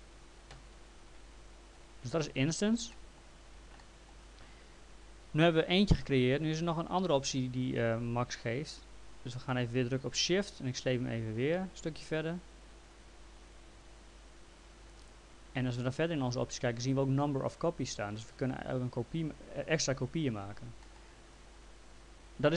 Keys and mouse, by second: 1.7 click, 2.9 middle click, 5.1 click, 10.9 shift+click, 20.8 middle click.